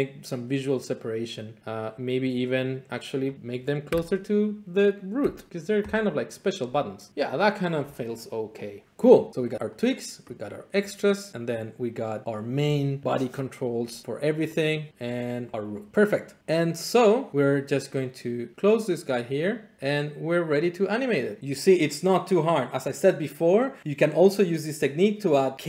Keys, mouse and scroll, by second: 3.5 click, 3.9 Delete, 5.2 Delete, 6.0 click, 7.1 click, 9.3 click, 9.8 click, 10.8 click, 14.3-16.4 drag, 17.3 click, 19.8 middle click.